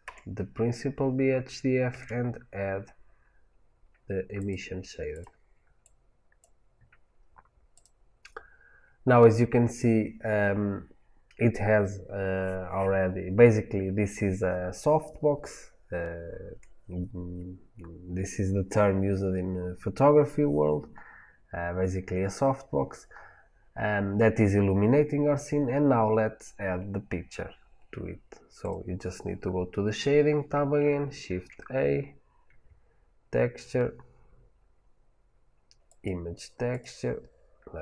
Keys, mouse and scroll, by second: 0.0 Delete, 6.3-7.7 drag, 28.6 click.